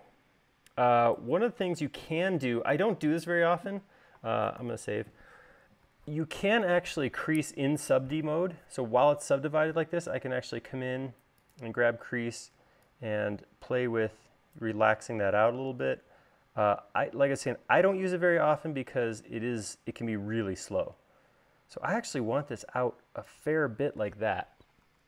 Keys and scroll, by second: 5.4 super+s.